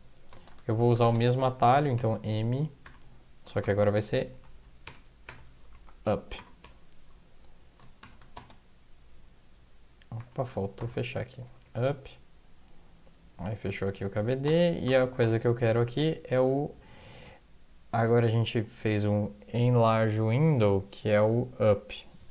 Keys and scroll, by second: 0.0-9.1 typing, 10.2-12.1 typing, 13.5-15.2 typing.